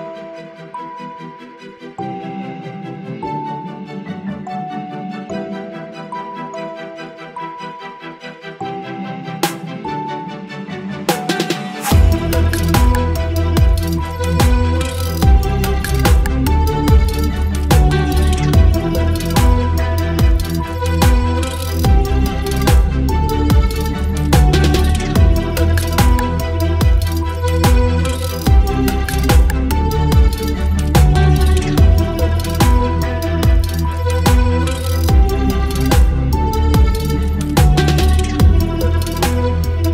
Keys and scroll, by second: 1.8 Up, 2.0 l, 3.4 Delete, 4.2 space, 5.1 space, 7.1 Delete, 15.0 Delete, 24.2 ctrl+BackSpace, 26.9 space, 28.2 ctrl+e, 28.6 space, 35.6 space, 36.8 Delete.